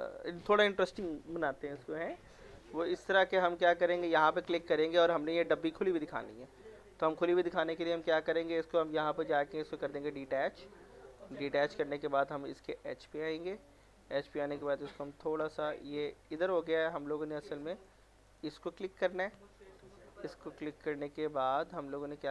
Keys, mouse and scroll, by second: 0.2 scroll up 1, 3.6 click, 4.8 scroll down 1, 5.1 middle click, 6.7 alt+middle click, 6.9 scroll up 1, 7.1 middle click, 10.2 click, 11.7 alt+middle click, 12.5 click, 13.7 middle click, 14.7-16.4 drag, 16.4 ctrl+z, 17.7 click, 18.6 scroll down 1, 18.9 middle click, 19.4 middle click, 20.7 click.